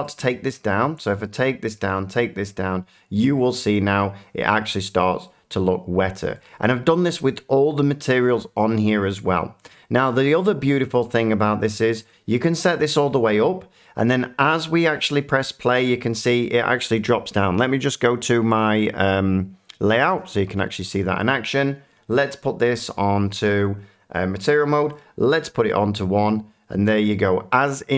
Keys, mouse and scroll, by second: 4.2 click, 5.2 middle click, 6.4 shift+middle click, 12.8 click, 20.1 click, 22.2 click, 26.8 click.